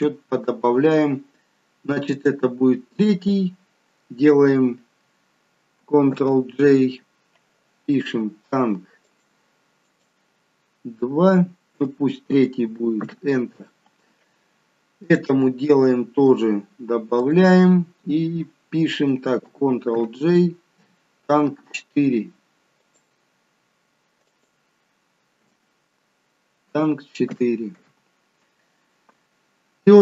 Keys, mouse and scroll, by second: 2.0 click, 6.1 ctrl+g, 9.0 click, 15.0 click, 17.1 click, 19.8 ctrl+g, 22.7 click, 29.7-30.0 scroll down 1.